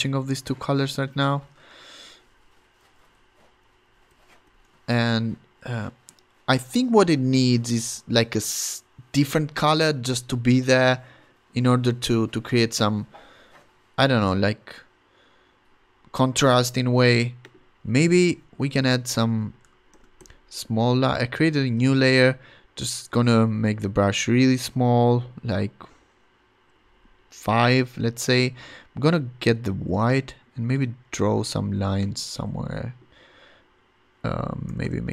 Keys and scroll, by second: 1.0 Return, 2.0 shift+Up, 2.8 shift+Down, 3.6 shift+Up, 4.1 shift+Down, 4.4 shift+Up, 18.6 b, 19.9 shift+super+n, 20.5 Return, 21.4 ], 21.7 [, 26.7 ], 28.4 ], 31.2 super+z, 34.7 [.